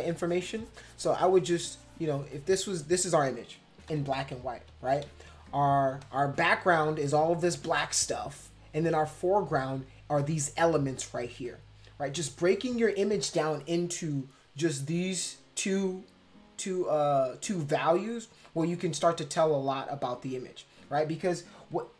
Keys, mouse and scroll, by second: 2.3 click, 3.0 space, 3.9 ctrl+-, 4.1 ctrl+-, 4.3 ctrl+-, 4.7 ctrl+=, 5.0 ctrl+=, 5.5 space, 6.0 click.